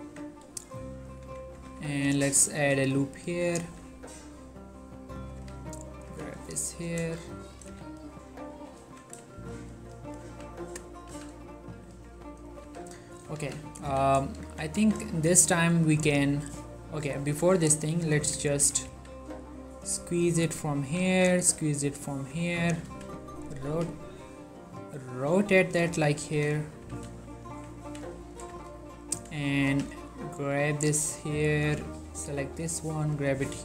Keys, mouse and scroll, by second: 0.2 Tab, 1.7 z, 2.2 ctrl+r, 2.5 click, 2.7 right click, 3.2 click, 3.4 g, 3.7 y, 3.9-4.9 scroll up 1, 5.3 click, 5.5-8.9 typing, 6.8 shift+middle click, 6.8 shift+scroll up 2, 8.2 click, 9.1 click, 9.5 shift+middle click, 10.3 z, 11.2 z, 11.7 click, 12.0 g, 12.6 right click, 12.7 z, 13.0 Tab, 13.5 ctrl+a, 13.7 click, 14.0 1, 14.6 Tab, 14.9 z, 15.2-17.3 shift+middle drag, 18.0 click, 18.7 s, 19.0 x, 19.9 click, 21.0 s, 22.2 click, 22.5 Tab, 23.0 r, 23.7 click, 23.7 g, 24.8 click, 25.3 g, 25.9 click, 26.2 shift+middle click, 26.5 Tab, 27.0 z, 27.2 middle click, 28.0 1, 28.4 shift+middle click, 28.8 ctrl+middle click, 29.4 click, 29.8 g, 31.6 click, 32.4 g, 33.2 click, 33.4 z.